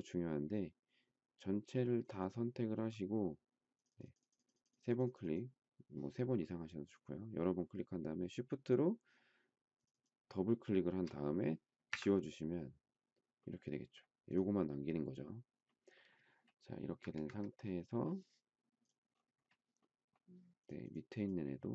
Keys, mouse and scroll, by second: 9.7 shift+click, 11.8 Delete, 17.0 Escape, 17.2 Escape.